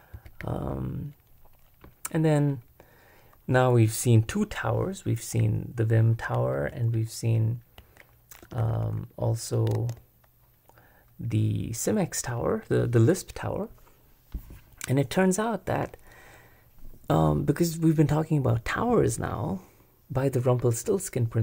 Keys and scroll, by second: 0.0-1.1 typing, 6.5 super+Return, 8.4 super+b, 8.7 super+b, 9.8 super+Escape.